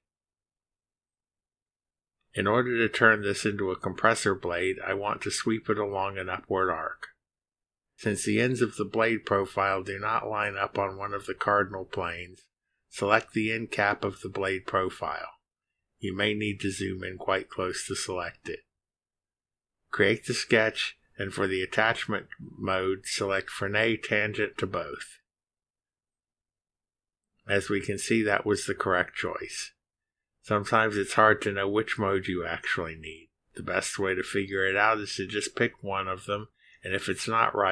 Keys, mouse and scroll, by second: 5.5 click, 12.8-13.7 scroll up 2, 17.9-18.6 scroll up 4, 19.9 click, 22.4 click, 23.9 click, 25.3 click, 26.1 click, 26.7 click, 27.5 click, 28.3 scroll down 2.